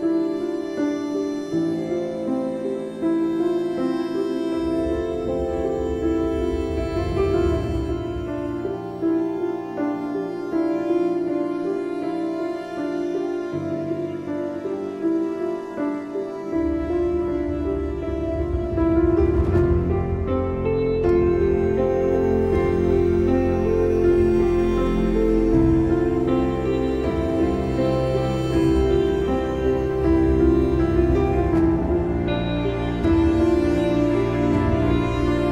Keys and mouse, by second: 7.6 ctrl+[, 17.9 ctrl+=, 19.7 click, 25.3 click, 26.1 ctrl+-, 29.2 space, 29.4 click, 29.8 space, 30.7 click, 32.9 click, 33.9 click.